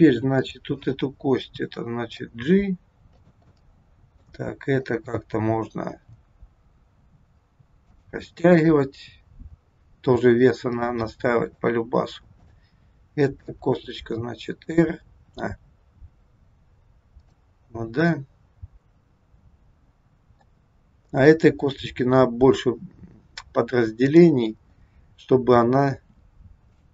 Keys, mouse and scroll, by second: 0.4 click, 1.4 middle click, 2.3 g, 3.5 middle click, 4.8 click, 5.9 g, 8.4 click, 9.4 g, 10.8 middle click, 12.3 click, 13.5 r, 17.8-18.2 scroll down 2, 18.2 middle click, 20.9 scroll up 2, 24.0 click, 25.9 r.